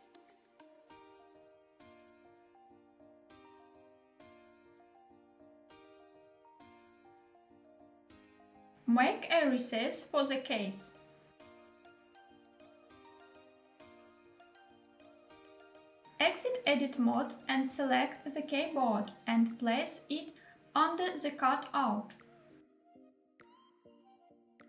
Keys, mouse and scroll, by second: 1.3 click, 1.6 g, 1.8 y, 3.4 click, 4.0 s, 4.1 y, 5.2 click, 5.9 g, 5.9 y, 7.5 click, 7.9 middle click, 8.8 e, 10.4 z, 13.9 click, 14.5-16.0 middle drag, 16.0 scroll down 1, 16.4 Tab, 17.0-17.6 middle drag, 17.9 click, 18.2 middle click, 19.4 KP_7, 21.3 g, 21.3 x, 23.2 click, 24.0 s.